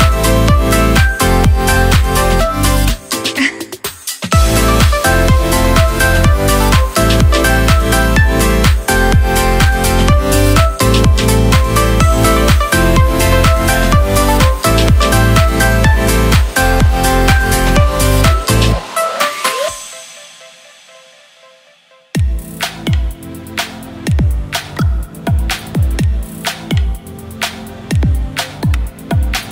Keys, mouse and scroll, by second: 0.0 ctrl+f, 3.1 ctrl+g, 6.6 shift+click, 7.1 shift+click, 11.9 space, 12.0 click, 16.1 shift+click, 18.2 space, 18.3-19.7 drag, 20.6 ctrl+g, 21.3 shift+click, 26.4-26.8 shift+drag, 29.4-29.5 shift+drag.